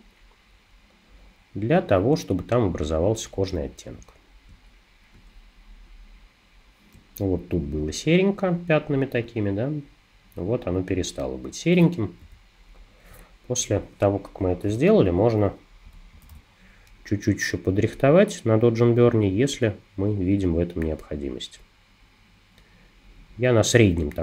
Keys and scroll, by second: 4.5 space, 7.0 space, 12.2 super+-, 14.7 o, 15.9 [.